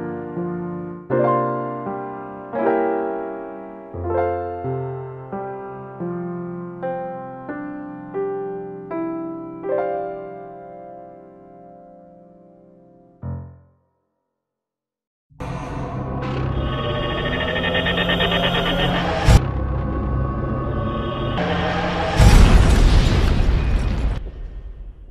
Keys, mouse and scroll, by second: 0.3-1.0 scroll up 6, 1.8 scroll up 2, 2.5 shift+middle click, 4.5-5.9 scroll down 5, 6.1 middle click, 8.4-9.1 scroll down 2, 10.0 middle click, 13.4 n, 14.5-15.1 scroll up 2.